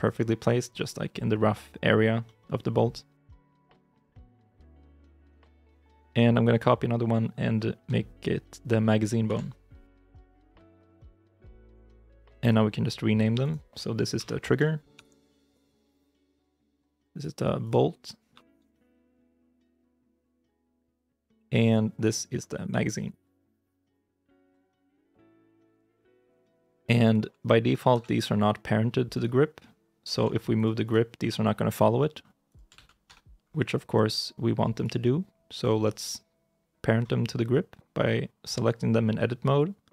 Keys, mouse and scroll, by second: 0.6 middle click, 1.8 scroll down 1, 2.1 middle click, 3.2 KP_1, 3.6 KP_3, 3.8 KP_9, 5.2 shift+i, 5.6 shift+middle click, 9.1 shift+i, 10.5 shift+d, 11.3 shift+middle click, 13.3 right click, 14.0 F2, 14.8-15.7 typing, 15.8 Return, 17.0 right click, 18.2 F2, 18.7-19.3 typing, 19.6 Return, 21.9 right click, 22.5 F2, 23.2-24.4 typing, 24.7 Return, 26.6 shift+i, 27.2-27.8 shift+scroll down 2, 27.2 m, 27.8 ctrl+Tab, 29.0 right click, 30.7 right click, 31.1 g, 32.9 Tab, 32.9 ctrl+z, 33.3 scroll up 1, 34.6 right click.